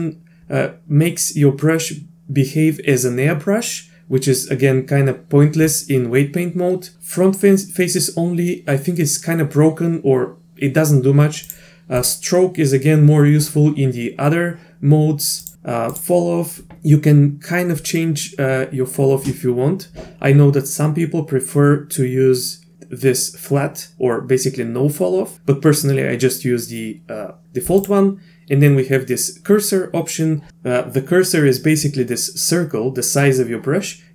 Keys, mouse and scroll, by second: 11.5 click, 12.0 click, 15.5 click.